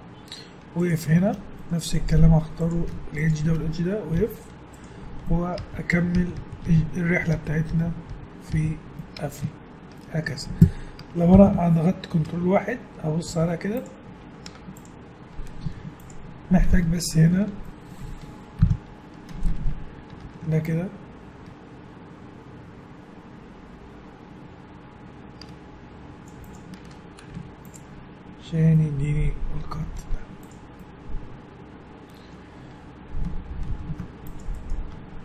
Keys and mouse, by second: 1.7-4.2 drag, 4.2 f, 4.7-6.1 drag, 5.6-8.5 typing, 9.4 Tab, 11.3 KP_1, 12.2 ctrl+1, 13.3 z, 14.5 Tab, 15.6 z, 18.6 KP_1, 20.1 ctrl+r, 26.9 Tab, 27.3 z, 28.7-31.6 middle drag, 30.1 Tab, 33.7 ctrl+r, 34.9 Tab.